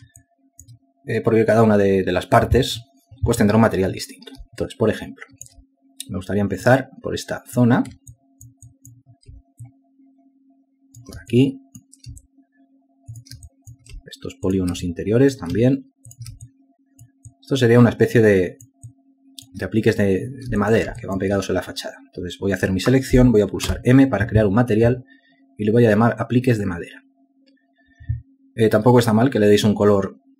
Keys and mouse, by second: 0.9 alt+shift+click, 6.0 ctrl+alt+click, 9.5 alt+click, 10.0 alt+click, 11.0 shift+click, 12.7 alt+click, 14.5 shift+click, 14.8 alt+click, 15.8 shift+click, 16.2 alt+click, 17.5 shift+click, 17.8 alt+click, 20.3 alt+click, 22.0 ctrl+alt+click, 22.4 alt+shift+click, 22.6 alt+shift+double click, 25.1 m.